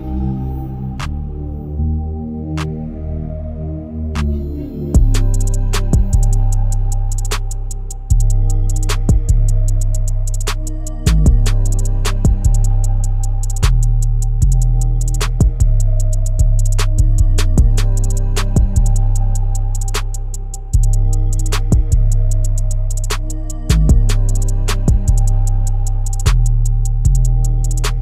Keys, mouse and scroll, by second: 0.3 KP_1, 1.2 ctrl+KP_1, 1.6 Tab, 2.0-2.9 scroll up 2, 2.9 click, 3.3-4.3 shift+middle drag, 4.3 2, 5.1 click, 6.0-8.4 scroll down 1, 8.4 u, 10.8 l, 12.5 u, 15.2 Tab, 16.2 KP_1, 17.1 Tab, 17.5 Tab, 20.0 KP_Divide, 20.8 click, 21.3 shift+middle click, 21.8-23.9 scroll down 1, 23.9 KP_1, 26.2-28.0 scroll up 3.